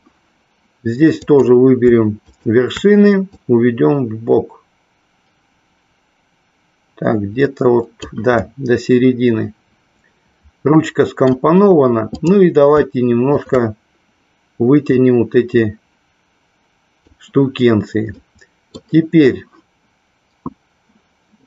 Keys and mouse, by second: 1.3 click, 3.2-8.0 drag, 8.5-11.2 middle drag, 13.2 shift+click, 15.0-17.0 drag, 18.2 middle click.